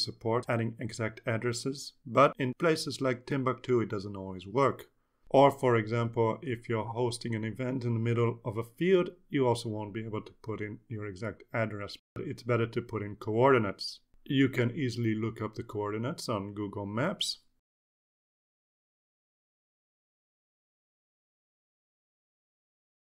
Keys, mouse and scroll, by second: 18.7 click, 20.7 click, 21.6-22.6 drag.